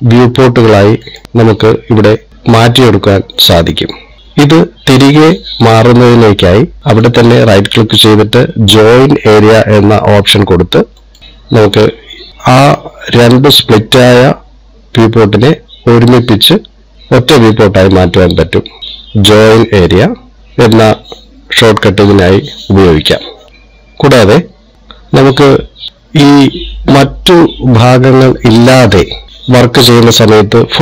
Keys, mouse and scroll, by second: 1.7 right click, 2.3 right click.